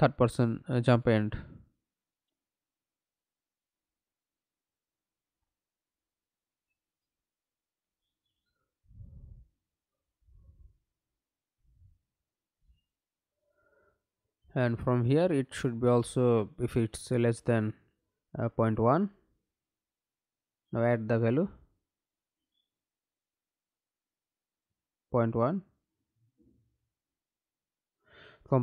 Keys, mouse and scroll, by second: 1.2-4.5 typing, 5.7 Left, 6.0 Left, 6.4 Left, 6.6 Left, 7.1 Left, 7.4 Left, 8.3 space, 8.5 Left, 9.6 c, 9.9 u, 11.9 Up, 12.4 Return, 16.6 shift+,, 17.4 Return, 25.1 Right, 25.6 BackSpace, 26.6 1, 27.0 Return.